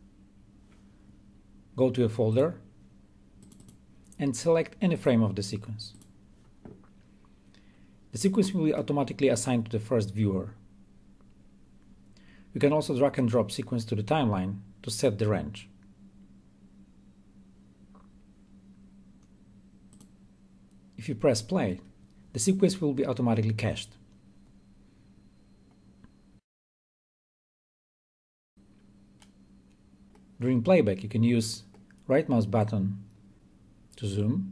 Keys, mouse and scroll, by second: 2.1 click, 13.0-15.2 drag, 19.8 click, 28.3-30.0 right drag, 32.5-34.5 right drag.